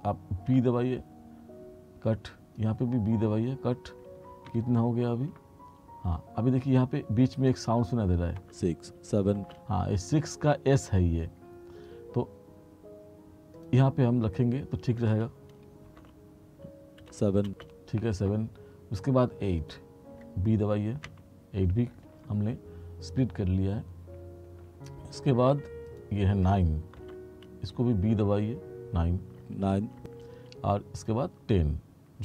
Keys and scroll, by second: 0.6 b, 3.3 b, 8.5 space, 16.1 b, 17.1 space, 21.1 b, 27.1 b, 29.5 space.